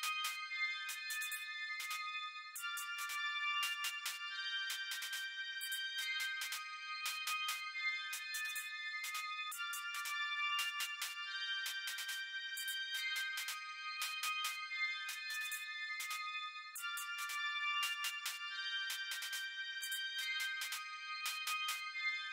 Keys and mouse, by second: 0.7 click, 2.1 click, 4.3 click, 5.3-8.0 drag, 11.4 click, 20.7 click.